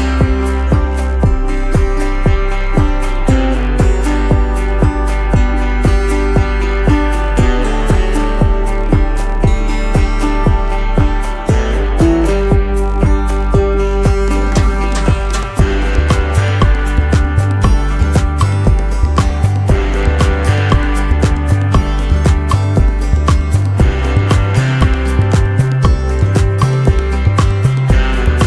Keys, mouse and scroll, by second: 3.1 alt+scroll down 1, 3.8-4.4 alt+scroll down 1, 5.8 space, 7.1-8.1 typing, 9.5 space, 10.3 t, 12.9 BackSpace, 13.2 Return, 16.1 ctrl+l, 16.5 ctrl+shift+], 16.7 space, 16.8 scroll up 1, 17.4 alt+scroll up 1, 18.4 space, 19.2 t, 20.7 shift+End, 21.3 ctrl+x, 24.0 t, 24.5 ctrl+a, 25.1 ctrl+v.